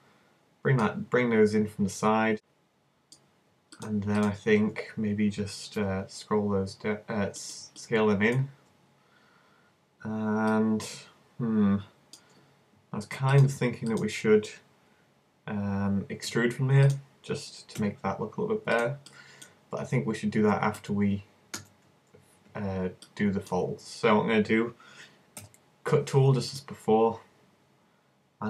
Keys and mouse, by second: 2.3-4.2 middle drag, 4.2-5.8 drag, 5.8 s, 7.5-9.0 drag, 9.0-11.4 middle drag, 16.3 e, 16.9 click, 17.8 s, 19.5 click, 20.4 z, 20.8 z, 21.6 super+z, 25.4 k.